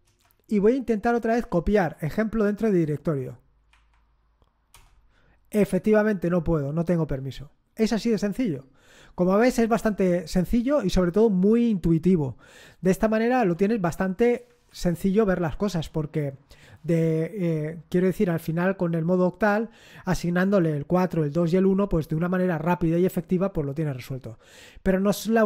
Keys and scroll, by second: 0.0 Return, 1.3 Up, 1.7 Up, 3.7 Up, 4.7 Return, 13.4 alt+Tab, 14.4 alt+Tab, 14.6 alt+Tab.